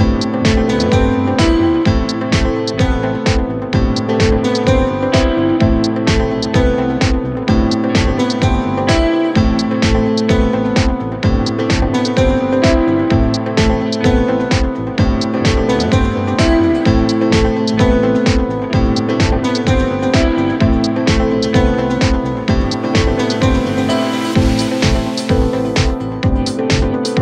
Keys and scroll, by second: 1.4 4, 3.7 3, 4.9 ], 5.9 ], 9.2 ., 10.6 4, 11.0 3, 12.3 ], 16.0 4, 22.2 ], 24.9 ], 26.7 4.